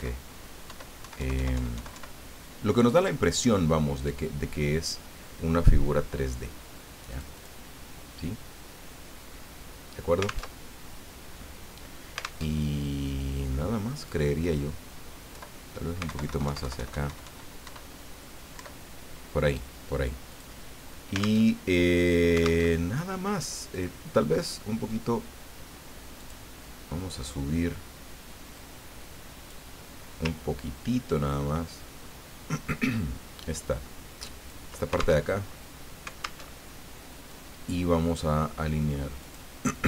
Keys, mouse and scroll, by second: 0.6 alt+Up, 1.0 alt+Right, 7.1 click, 10.5 alt+Tab, 12.5 alt+Tab, 14.0 click, 15.3 Left, 16.1 alt+Right, 17.6 alt+Up, 18.5 alt+Down, 20.3 click, 21.4 alt+Tab, 22.6 alt+Tab, 23.7 click, 26.2 click, 28.5-29.7 drag, 31.1-35.2 ctrl+drag, 35.3 ctrl+alt+Tab, 36.5 alt+Tab, 37.3-38.3 drag, 39.2 click.